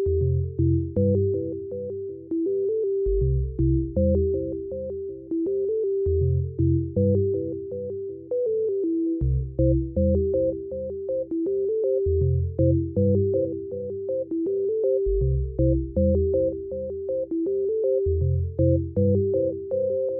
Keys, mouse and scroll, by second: 0.3 right click, 0.3 a, 0.4 middle click, 0.7 ctrl+r, 2.3 right click, 2.4 z, 2.5 z, 2.7 ctrl+r, 4.6 right click, 4.7 middle click, 4.7 z, 4.9 ctrl+r, 5.3 q, 5.5 g, 6.0 g, 7.7 ctrl+z, 7.9 ctrl+r, 8.3 middle click, 8.5 ctrl+r, 8.7-17.8 typing, 9.8 ctrl+r, 9.8 middle click, 10.9-11.9 right drag, 11.9-13.2 middle drag, 12.9 ctrl+r, 13.9 middle click, 13.9 ctrl+r, 14.7 right click, 15.4 Tab, 15.5 middle click, 15.6 Tab, 16.0-17.6 right drag, 16.9 ctrl+r, 17.5 middle click, 17.6 ctrl+z, 18.0 ctrl+r, 18.3 right click, 18.8 ctrl+r, 19.0-20.1 typing, 19.2 middle click, 19.9 right click.